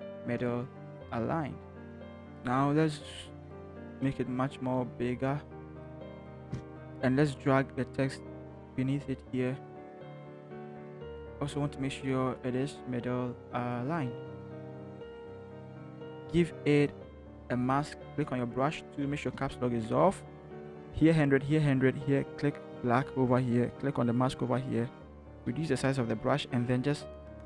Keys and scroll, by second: 0.3 ctrl+shift+h, 1.8 ctrl+shift+Return, 3.6 ctrl+t, 6.5 shift+Return, 10.6 ctrl+t, 11.3 ctrl+shift+t, 14.6 Return, 15.1 ctrl+t, 15.8 alt+shift+Return, 18.1 b, 19.3 Caps_Lock, 25.5-27.1 typing.